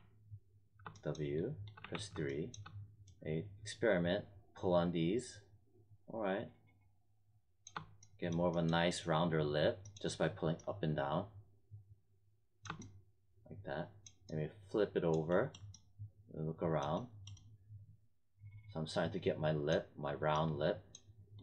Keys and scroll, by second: 1.7 3.